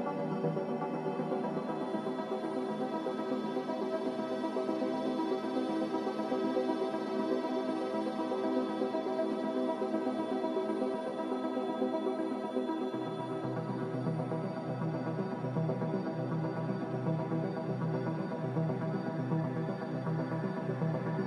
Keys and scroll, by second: 12.7 typing, 14.8-15.5 typing, 17.3 s.